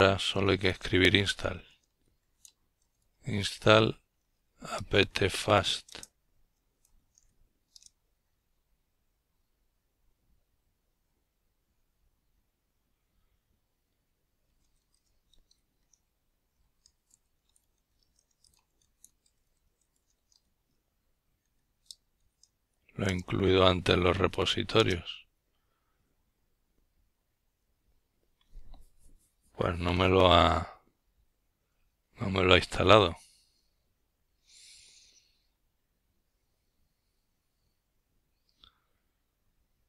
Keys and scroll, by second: 3.5-14.0 typing.